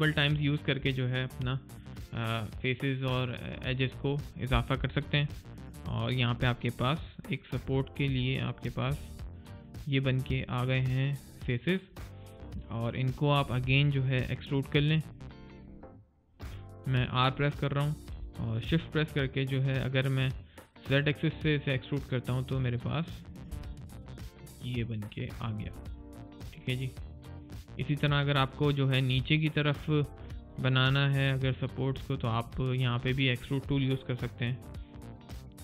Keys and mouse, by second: 5.3 alt+click, 9.3 alt+right click, 10.3 alt+click, 11.9 alt+right click, 12.3 alt+middle click, 12.7 alt+click, 21.2 alt+click, 24.1 alt+right click, 25.3 click, 25.6 right click, 25.9 middle click, 26.2 right click, 26.5 click, 27.7 right click, 27.9 click, 28.3 middle click, 28.8 click, 30.4 alt+right click, 30.8 alt+click, 31.3 alt+middle click, 31.8 alt+click, 32.4 alt+middle click, 34.3 alt+right click, 34.7 alt+click.